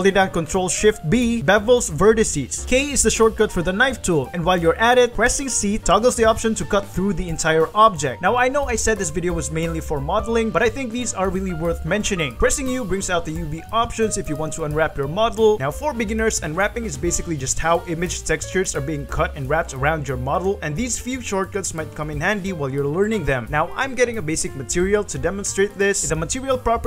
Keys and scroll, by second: 0.8 1, 1.9 ctrl+shift+b, 3.3 v, 5.8 k, 6.2 c, 7.2 v, 10.8 shift+s, 10.9 3, 11.1 p, 12.7 u, 18.3-20.4 typing, 18.7 Return, 21.8 s, 22.7 g.